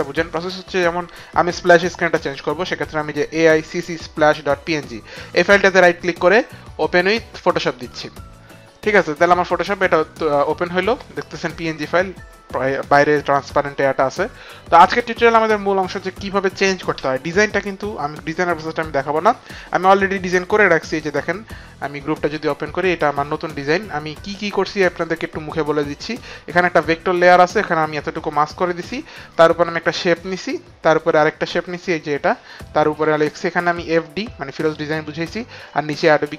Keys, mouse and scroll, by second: 5.0 click, 5.6 right click, 8.2 click, 8.2 right click, 22.7 click, 24.7 click, 29.3 click, 30.9 click, 35.1 click, 35.5 click.